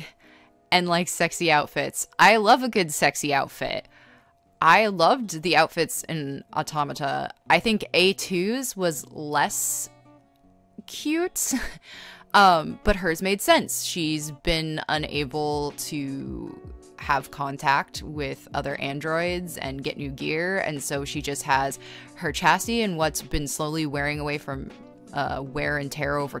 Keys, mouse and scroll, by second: 0.2 scroll, 0.8 space, 1.4 scroll, 6.3 space, 6.8 ctrl+z, 8.0 e, 8.3 b, 8.7 ctrl+z, 9.6 ctrl+z, 10.3 ctrl+z, 13.0-13.9 typing, 15.3-16.8 typing, 19.5-21.4 typing, 22.2 scroll, 23.4 scroll, 23.6 space, 24.6-25.2 scroll.